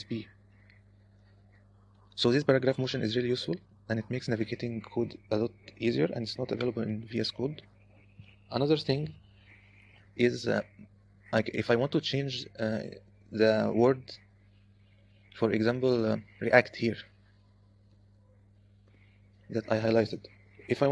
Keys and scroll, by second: 1.3 u, 3.0 }, 3.7 {, 3.8 {, 4.3 {, 10.9-12.4 typing, 15.1 0, 16.2-19.1 typing.